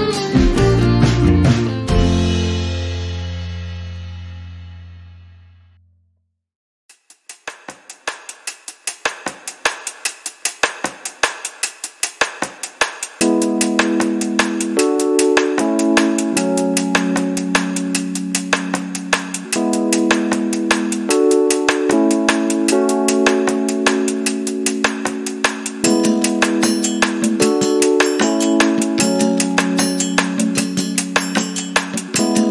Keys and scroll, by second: 1.6 p, 2.7 5, 3.4 Return, 4.3 space, 7.0 m, 10.0 m, 10.4 space, 13.3 b, 25.2 space, 29.9 t.